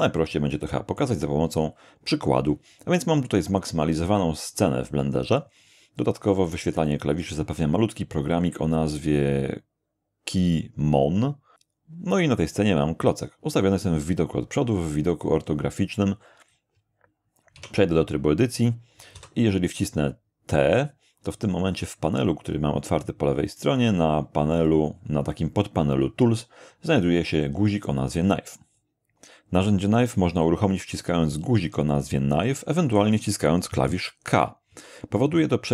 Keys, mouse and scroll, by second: 0.0 scroll up 2, 0.5 shift+middle click, 1.2 shift+scroll down 2, 17.5 Tab, 19.1 t, 23.4 click, 34.7 k.